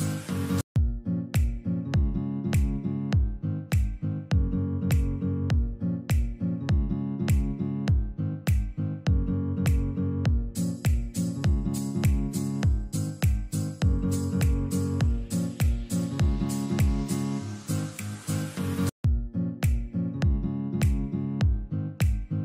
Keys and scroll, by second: 12.8 alt+c, 17.8 alt+c, 18.4 F4, 18.9 Escape, 21.5 alt+c.